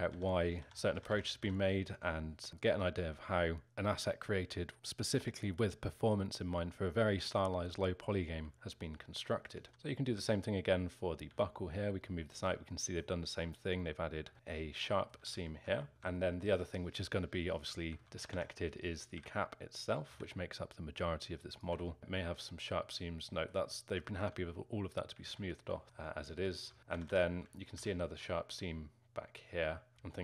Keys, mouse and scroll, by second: 0.0-1.4 typing, 8.3 l, 8.6 l, 9.6 s, 9.7 a, 10.0 l, 11.3 g, 12.7-15.3 alt+middle drag, 15.3 ctrl+z, 15.8-16.9 alt+middle drag, 16.9-17.6 scroll up 1, 17.6-18.0 scroll down 1, 18.0 alt+middle click, 18.1 a, 18.3 a, 19.1 l, 20.1 g, 21.8-25.2 alt+middle drag, 25.2 ctrl+z, 25.8-26.9 alt+middle drag, 26.9 a, 27.1 a, 27.5 alt+middle click, 27.7 z.